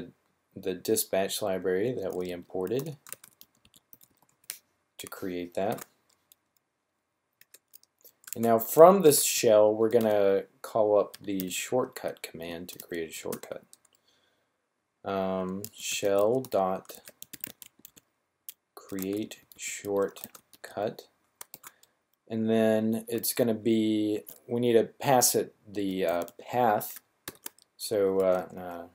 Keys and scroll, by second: 1.4-4.2 typing, 5.6 typing, 7.9-9.8 typing, 11.1-13.1 typing, 15.1-17.7 typing, 19.0-21.4 typing, 22.9 typing, 24.0 typing, 25.5-26.2 typing, 27.2-28.5 typing.